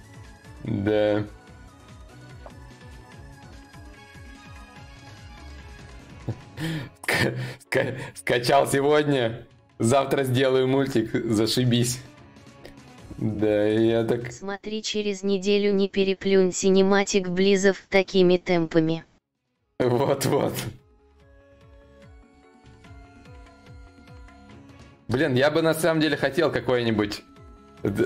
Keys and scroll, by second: 24.6 Return.